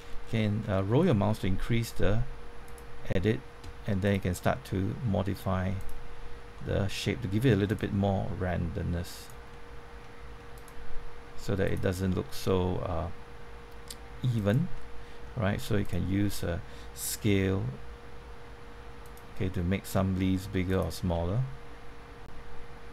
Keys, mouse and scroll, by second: 2.6 click, 5.0 typing, 5.7 click, 6.5 middle click, 7.6 click, 8.2 typing, 9.1 click, 9.5 middle click, 10.5 click, 12.9 g, 14.3 click, 14.7 middle click, 15.8 click, 17.2 s, 19.0 click, 19.4 middle click, 20.7 click.